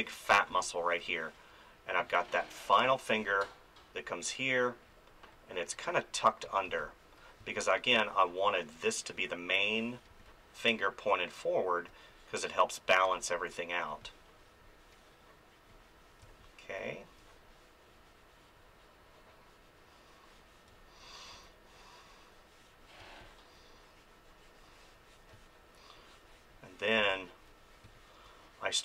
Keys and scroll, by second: 0.5 space, 2.7 space, 6.7 space, 10.1 space, 16.2 space, 20.7 space, 21.3 ctrl+z, 23.0 space, 25.3 space, 27.0 space.